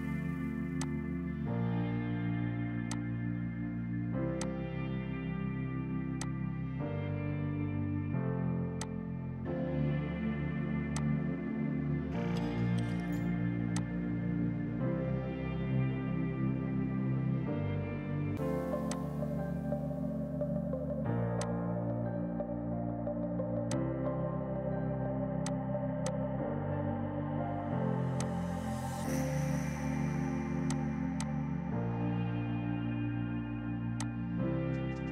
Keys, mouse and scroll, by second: 0.9 click, 2.6 space, 2.9 click, 3.5 space, 4.5 click, 7.1 space, 8.9 click, 9.7 Delete, 10.7 F2, 11.0 click, 11.9 right click, 13.9 click, 19.0 click, 21.4 F2, 21.5 click, 21.7 right click, 22.7 Escape, 23.4 F6, 23.8 click, 25.3-26.4 typing, 25.5 click, 26.1 click, 30.0 space, 30.7 click, 31.0 Page_Down, 31.2 click, 32.1 right click, 34.0 click.